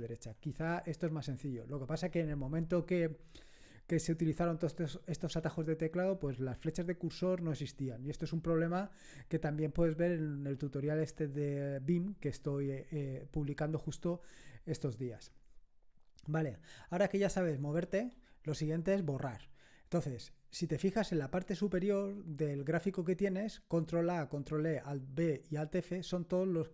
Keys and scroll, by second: 17.4 ctrl+Right.